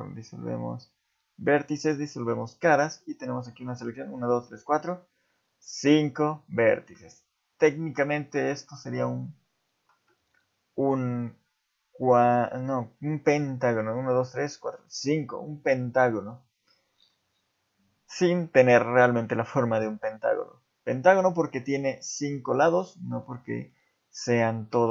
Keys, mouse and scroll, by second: 2.5 shift+middle click, 2.7 scroll up 1, 3.3 scroll up 3, 17.1-20.0 scroll down 1, 20.0-22.0 scroll down 1, 22.0-23.3 scroll down 1, 24.3 scroll up 2.